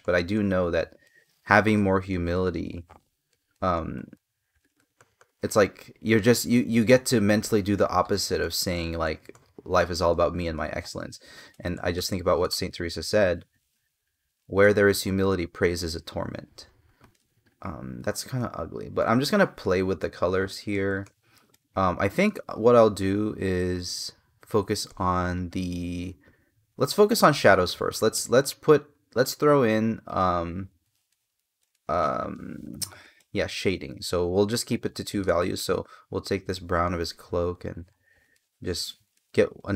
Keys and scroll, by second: 7.2 space, 11.4 space, 20.4 space, 21.9 space, 24.6 space, 30.7 space, 38.9 space.